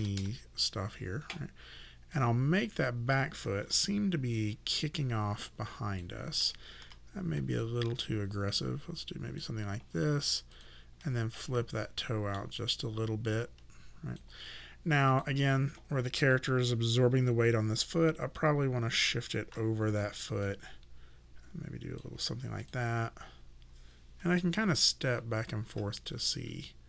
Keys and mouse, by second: 0.0 KP_0, 0.2 Return, 0.2 KP_Enter, 2.2 click, 3.7 e, 4.4 click, 6.8 w, 7.6 click, 10.5 click, 11.0 middle click, 12.7 click, 15.1 click, 18.0 click, 19.9 e, 20.5 click, 22.6 click, 25.0-26.8 typing.